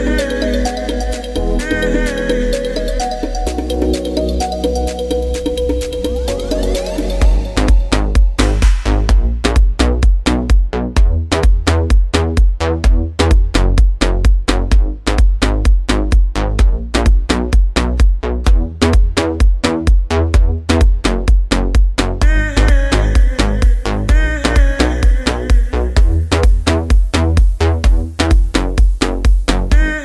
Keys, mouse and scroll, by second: 4.8-7.2 scroll up 1, 7.4-13.1 drag, 15.8 click, 18.4 right click, 19.9 click, 19.9 click, 26.7 click.